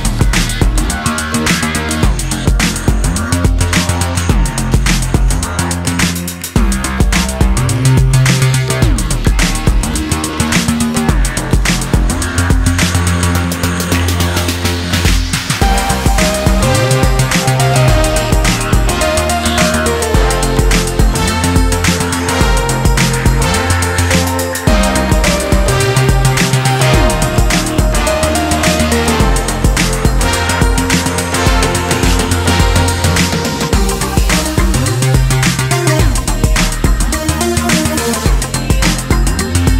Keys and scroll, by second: 28.1 ctrl+t.